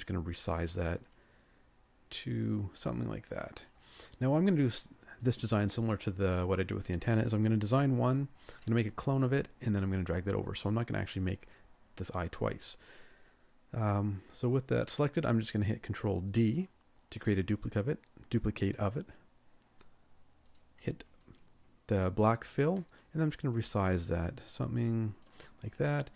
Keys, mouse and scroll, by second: 13.8-14.3 scroll up 1, 14.3-15.0 scroll down 1, 22.9 ctrl+shift+click, 25.7 ctrl+shift+scroll up 1.